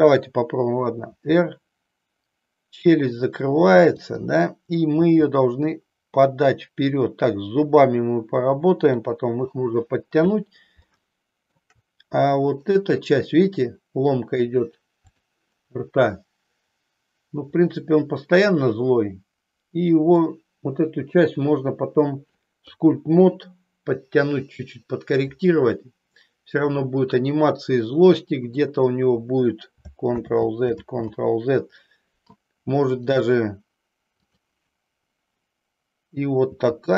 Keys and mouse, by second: 1.2 r, 4.1 click, 5.1 g, 10.9 shift+middle click, 15.1 click, 18.5-20.3 middle drag, 22.6 KP_3, 30.3 ctrl+z, 31.0 ctrl+z, 34.3-35.3 drag, 36.4 g.